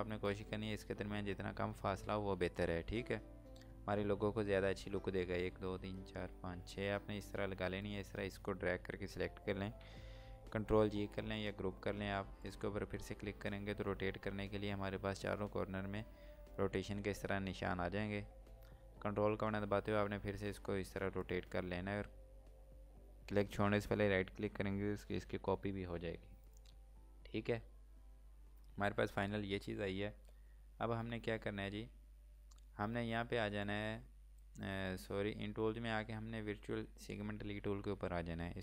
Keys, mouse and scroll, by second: 0.1 ctrl+right click, 3.6 ctrl+Num_Lock, 3.9-4.8 typing, 7.3-7.8 scroll down 1, 7.8 click, 12.3 click, 19.4 click, 21.0 ctrl+right click, 26.5 click, 31.4 scroll up 1, 33.5 click.